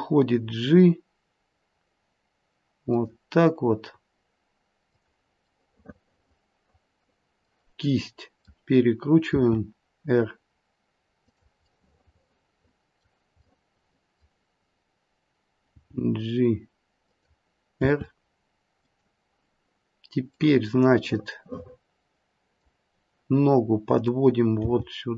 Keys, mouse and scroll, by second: 4.8 click, 5.5 middle click, 6.3 middle click, 6.7 middle click, 7.9 middle click, 9.2 middle click, 9.2 r, 11.8 middle click, 13.5 middle click, 15.6 g, 17.8 r, 20.4 middle click, 22.5 middle click, 23.9 click, 24.6 g.